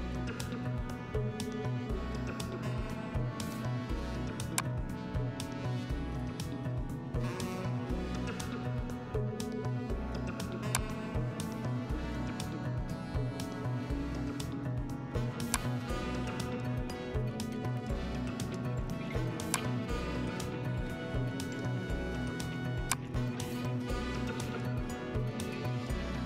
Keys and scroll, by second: 1.0 Down, 5.7 Down, 8.2 Left, 12.1 Down.